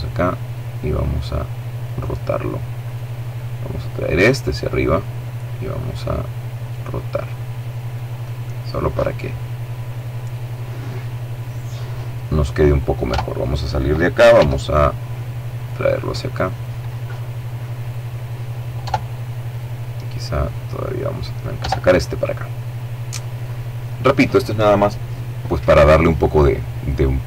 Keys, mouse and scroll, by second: 0.8 click, 1.7 right click, 2.7 click, 4.7-7.7 right drag, 7.1 click, 11.9 Tab, 13.2 g, 14.4 click, 17.6 Tab, 18.3 right click, 19.3 click, 20.4 Tab, 20.9-23.3 middle drag.